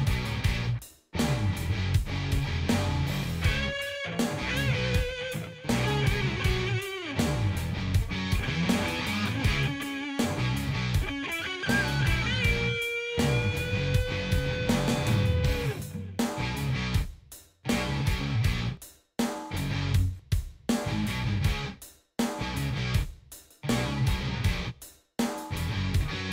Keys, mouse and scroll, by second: 0.1 ctrl+d, 1.5 click, 2.3 click, 3.0-5.6 ctrl+drag, 7.4 click, 8.6 click, 9.9 click, 11.7 click, 14.0 click, 15.2 ctrl+g, 17.0 click, 17.9 click, 18.8 click, 19.7 click, 20.2 click, 21.6 ctrl+s, 23.9 click, 25.9 click.